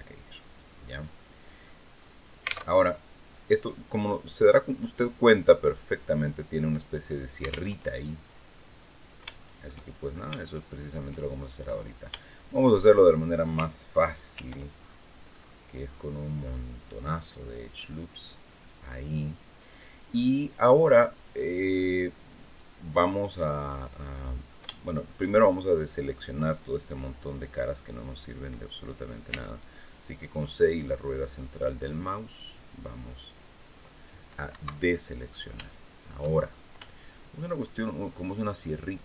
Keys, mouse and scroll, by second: 0.9 middle click, 1.7 scroll down 1, 2.4 alt+Tab, 3.7 click, 4.5-5.2 scroll up 4, 7.5 alt+Tab, 7.9-8.2 scroll down 2, 8.3 click, 10.2 shift+click, 11.2 shift+click, 12.7 shift+scroll up 2, 14.1 ctrl+r, 14.5-15.5 ctrl+scroll up 5, 15.6 scroll up 2, 16.2 scroll up 2, 17.3 click, 18.2 click, 19.4-19.8 scroll down 2, 22.3-22.7 scroll down 2, 23.7-25.0 middle drag, 27.7 click, 29.0 c, 30.2-33.7 middle drag, 34.3 Escape, 34.7 middle click, 34.9-36.1 drag, 36.2 shift+scroll up 3, 36.6 shift+click, 38.3 shift+right click.